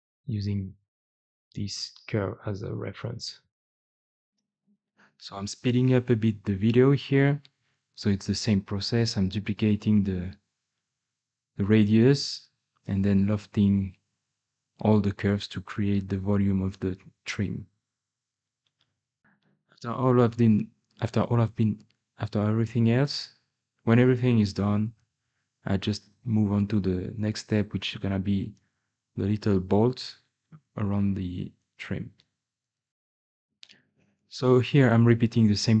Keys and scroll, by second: 4.2-8.6 typing, 5.4 ctrl+z, 5.7 Escape, 6.7 Escape, 7.6 Tab, 10.0-12.4 typing, 10.2 Escape, 11.6 Tab, 11.8 Tab, 14.3 2, 14.7 g, 17.1-19.1 typing, 17.8 Tab, 17.9 Tab, 19.7 Escape, 20.2 ctrl+z, 20.4 ctrl+z, 20.6 Escape, 20.9-26.5 typing, 22.6-23.0 Tab, 26.7 Tab, 26.9 Escape, 27.1 Escape, 27.6 i, 28.6 Escape, 28.6 2, 30.1-31.4 typing, 30.8 Tab, 31.1 Tab, 32.9 alt+Tab, 33.2-33.7 typing, 33.2 Escape, 34.0 ctrl+z, 34.1 Escape, 34.3 Escape, 35.4 Escape, 35.4-35.8 typing.